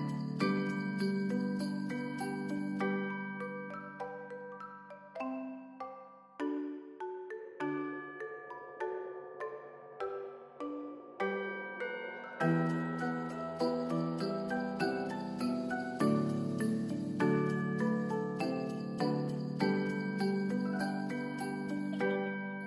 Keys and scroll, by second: 10.9 s, 14.2 ctrl+s, 19.7 ctrl+s.